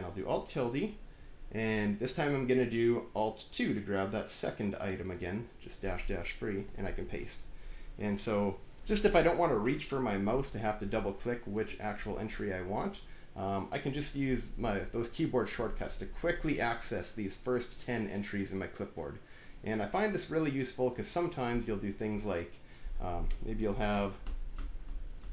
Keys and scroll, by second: 0.2 alt+`, 4.8 alt+2, 6.5 ctrl+v, 10.2 alt+`, 23.1-25.2 typing, 25.1 Return.